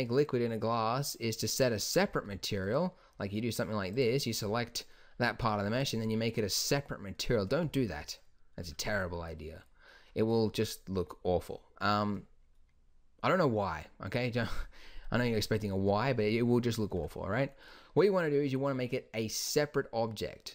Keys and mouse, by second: 4.6-5.8 drag, 5.8-7.3 middle drag, 7.3 click, 7.8 z, 9.0 z, 16.0-20.5 middle drag.